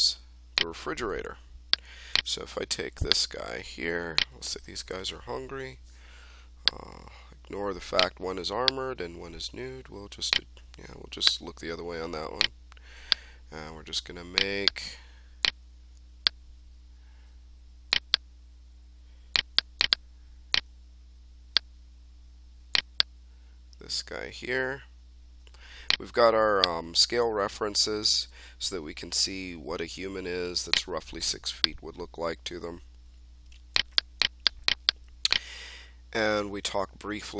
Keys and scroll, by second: 5.1-6.0 typing.